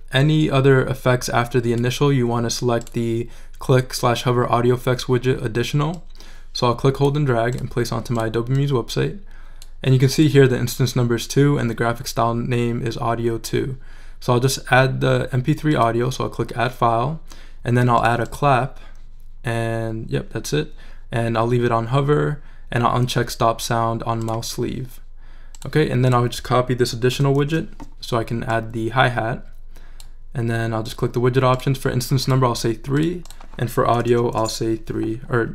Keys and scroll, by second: 27.1 super+c, 27.4 super+v, 34.0 BackSpace, 34.1 3, 34.4 Return.